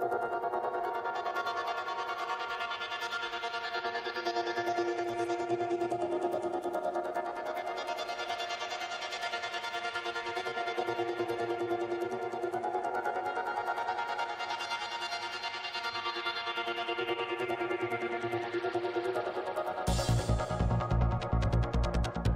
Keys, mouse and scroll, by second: 0.0 ctrl+shift+z, 0.3-1.5 drag, 1.5 f, 2.0-3.3 drag, 3.1 f, 3.8-7.0 drag, 4.2 f, 5.8 f, 7.0 middle click, 7.4-8.5 drag, 7.4 g, 7.5 right click, 8.2 f, 8.6 click, 9.0 right click, 9.3-11.3 middle drag, 10.2 f, 10.3-12.9 drag, 12.6 i, 12.9-14.5 middle drag, 12.9 f, 13.2 f, 13.4-14.8 drag, 13.7 shift+f, 14.6 middle click, 14.8 f, 15.1 click, 16.3 click, 16.3 g, 17.2 f, 17.6 click, 18.3 f, 18.9 f, 19.1 click, 19.1 middle click, 19.1 f, 19.8 shift+f, 20.3-22.3 drag, 21.5 middle click, 22.2 middle click.